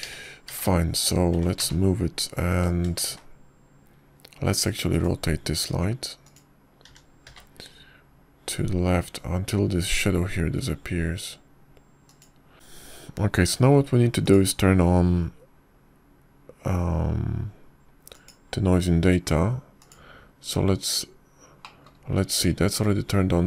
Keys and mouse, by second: 1.6 r, 1.9 x, 3.2 r, 3.5 z, 4.9 shift+z, 6.7 click, 8.2-8.7 drag, 8.7 r, 16.1 click, 20.0 click.